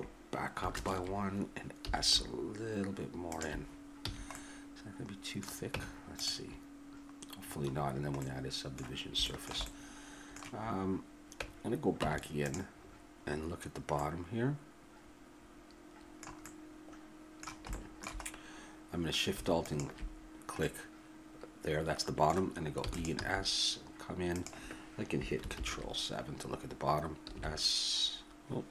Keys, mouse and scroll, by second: 0.7 ctrl+KP_Add, 1.9 s, 4.0 a, 5.0-6.3 drag, 5.7 Tab, 7.4-12.0 middle drag, 12.0 Tab, 12.8-16.0 middle drag, 16.4-19.6 middle drag, 19.6 click, 20.2-21.6 middle drag, 22.8 e, 23.1 s, 27.4 s.